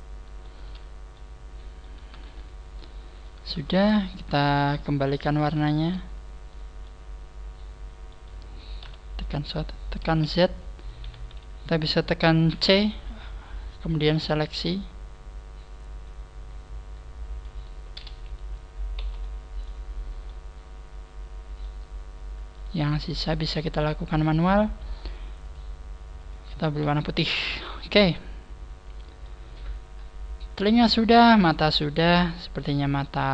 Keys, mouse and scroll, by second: 0.5 Tab, 1.1 middle click, 1.9 Tab, 2.2 middle click, 3.3 Tab, 3.6-3.9 scroll up 3, 4.0 shift+middle click, 4.5 scroll up 2, 4.8 a, 5.6 alt+shift+right click, 6.8 middle click, 7.3 middle click, 8.4-8.8 scroll down 4, 8.8 KP_1, 10.0 z, 10.5 scroll up 2, 11.1 a, 17.6 right click, 18.9 z, 19.2 middle click, 19.8 scroll up 2, 20.2 middle click, 21.6 middle click, 22.5 shift+right click, 23.6 shift+right click, 23.6 middle click, 25.3 click, 26.3 click, 26.8 a, 26.9-27.4 scroll down 6, 27.6 middle click, 29.8 scroll down 2, 31.5 middle click, 31.5 scroll down 1, 33.0 middle click.